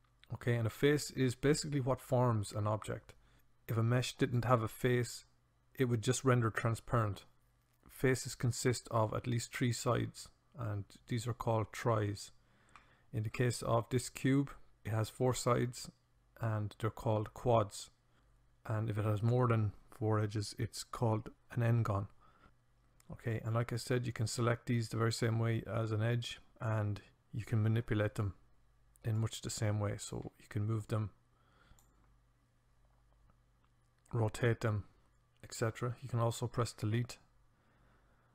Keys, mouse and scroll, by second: 23.3-28.1 drag, 29.1-35.0 drag, 36.6 Delete.